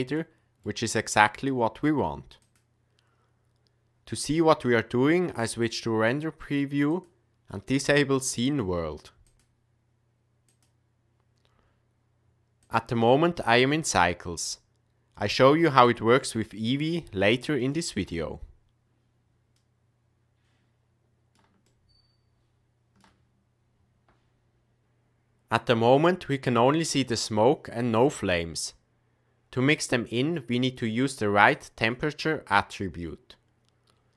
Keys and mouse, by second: 0.2 middle click, 2.4 click, 5.4 click, 7.0-11.1 drag, 17.8 shift+click, 19.8-23.0 middle drag.